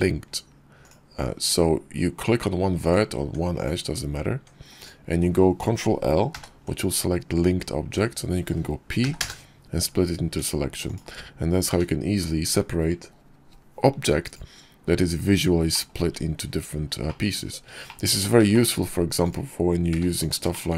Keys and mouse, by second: 0.7 click, 2.6 click, 3.0 Tab, 4.0 Tab, 4.6 click, 6.2 ctrl+l, 8.8 p, 10.1 Tab, 10.7 click, 11.5 g, 15.6 click, 15.9 `, 16.9 click, 19.1 click, 19.8 g, 20.4 shift+middle click.